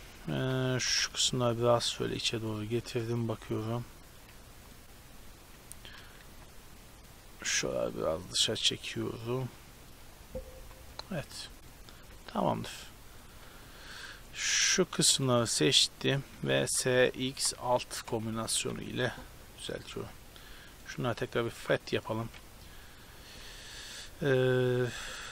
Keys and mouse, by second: 0.0-0.9 typing, 4.2 a, 4.7-7.1 right drag, 6.3 b, 7.4 g, 10.6 z, 11.0 middle click, 11.3 Tab, 12.1 a, 13.5 Tab, 14.4-16.2 middle drag, 16.7 s, 17.2 click, 18.5 a, 18.7 Tab, 19.7-21.9 drag, 20.7-21.9 right drag, 21.9-22.3 middle drag, 22.4 Tab, 22.7-25.3 middle drag.